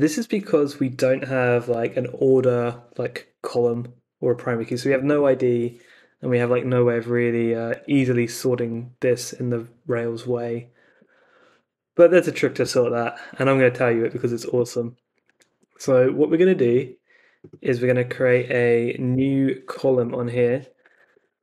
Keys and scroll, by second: 6.7 super+Tab, 10.9 super+Tab, 14.5 super+Tab, 19.1 Return, 19.7-21.4 typing.